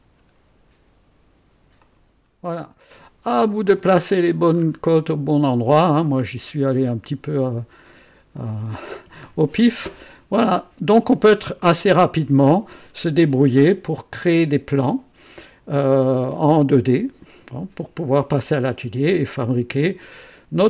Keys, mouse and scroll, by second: 1.7 click, 2.9-3.9 drag, 4.1-4.8 scroll down 3, 5.0-5.9 right drag, 6.1-6.5 scroll up 3, 6.7 scroll down 2, 7.2-7.8 right drag, 7.8 scroll up 2, 8.3-9.1 right drag, 9.3-9.6 scroll down 1.